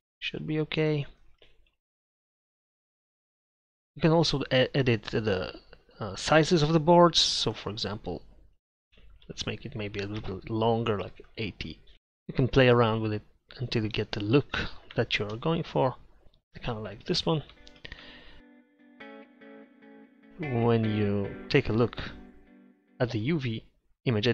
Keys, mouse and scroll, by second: 2.6 Tab.